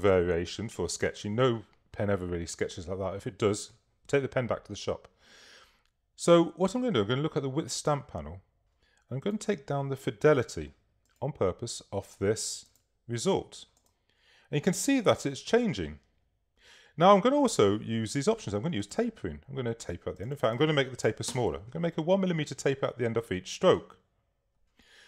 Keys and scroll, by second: 21.1 i, 21.3 Page_Up.